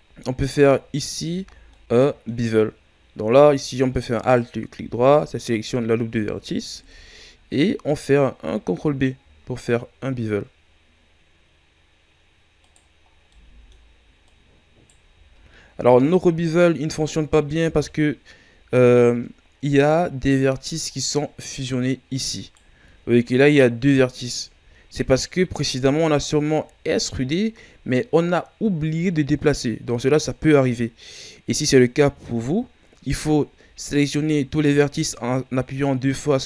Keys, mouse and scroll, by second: 0.1 scroll up 1, 0.4 Tab, 1.5 scroll down 2, 1.7-4.1 middle drag, 4.1-6.7 alt+right drag, 6.7 KP_1, 7.8 scroll up 2, 9.1 scroll up 1, 9.1 ctrl+b, 13.0 scroll down 1, 13.3 middle click, 14.2 right click, 15.1 ctrl+z, 16.0-17.6 middle drag, 17.6 KP_1, 18.8-19.6 scroll down 2, 19.6-21.4 scroll up 7, 21.4 scroll up 2, 21.4-22.7 right drag, 22.7 ctrl+z, 23.2-23.9 scroll up 1, 23.9 right click, 24.5 ctrl+z, 24.8-25.7 scroll down 9, 26.4 scroll down 2, 26.8 shift+scroll up 2, 27.5-30.5 ctrl+scroll up 1, 33.5 a, 34.1 a.